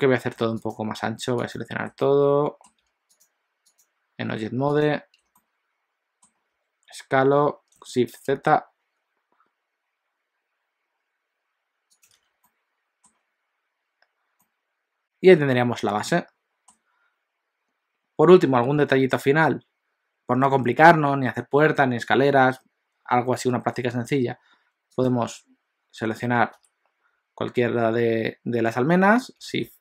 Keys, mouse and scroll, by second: 0.7 shift+click, 1.4 shift+click, 2.1 middle click, 3.2 shift+click, 3.7 shift+click, 4.9 shift+click, 5.4 middle click, 6.6 s, 12.2 alt+a, 12.5 middle click, 13.1 scroll down 1, 14.4 middle click, 14.4 scroll down 1, 15.0 middle click, 16.0 middle click, 18.0-19.0 scroll up 1, 25.0 click, 26.6 KP_1, 29.5 shift+d.